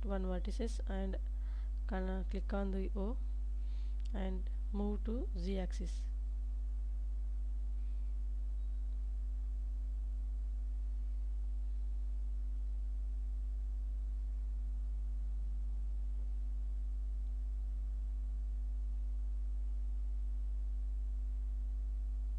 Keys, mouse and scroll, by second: 8.7 click, 9.2 middle click, 10.0 Tab, 11.1 ctrl+s, 11.8-13.4 middle drag, 14.8-15.9 middle drag, 16.7 Tab, 17.8 KP_7, 18.6 alt+z.